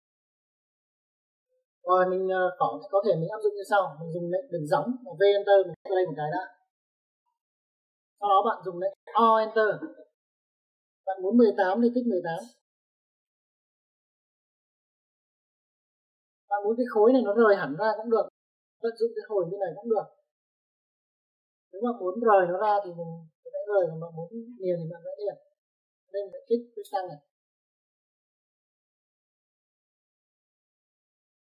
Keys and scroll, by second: 1.6 Escape, 5.8 v, 6.0 space, 8.5 space, 10.1 o, 10.7 space, 12.6 1, 13.1 8, 14.0 space, 16.8 space.